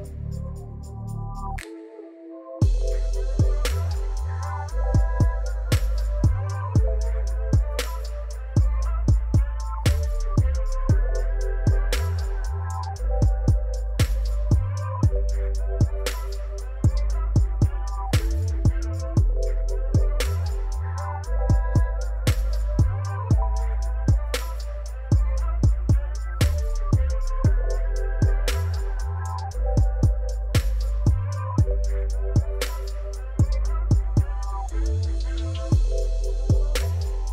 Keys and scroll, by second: 2.4 shift+a, 3.2 Tab, 3.6 s, 3.7 shift+z, 4.7-8.2 typing, 9.6 shift+z, 10.6 g, 10.7 z, 11.4 s, 12.7 s, 13.2 shift+z, 14.8 ctrl+r, 15.0 1, 15.2 Return, 15.9 3, 16.1 shift+z, 17.4 g, 19.4 shift+z, 19.8 shift+z, 20.9 g, 22.2 shift+z, 22.7 Tab, 23.7 Tab, 23.9 shift+z, 24.4 s, 25.5 shift+z, 26.4 Tab, 27.8 w, 27.9 o, 28.1 d, 28.5 Return, 31.1 ctrl+shift+t, 34.8 a, 35.0 u, 35.6 Tab, 36.6 shift+a.